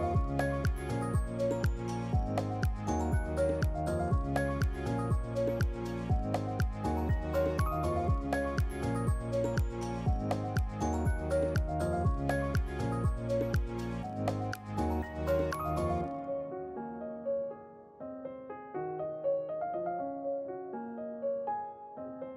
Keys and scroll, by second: 5.6 ctrl+q, 7.0 ctrl+q, 20.0 Delete.